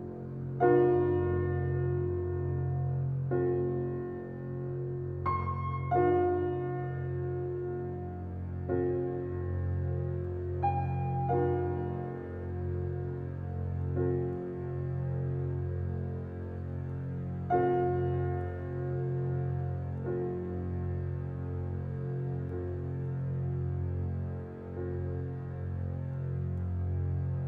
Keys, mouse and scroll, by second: 0.7 scroll down 1, 1.3-2.3 scroll up 1, 4.2 scroll down 1, 4.2 typing, 5.4 scroll up 1, 5.8-6.6 scroll down 1, 7.0-7.6 scroll down 1, 7.7-8.0 scroll up 1, 8.0-9.9 scroll down 1, 10.4 scroll up 1, 12.4 click, 12.8-13.8 scroll down 1, 14.5 scroll up 1, 16.2 click, 16.7 scroll down 1, 18.0-19.8 scroll up 1, 19.9 click, 24.7 shift+click, 25.3 right click, 26.1 click.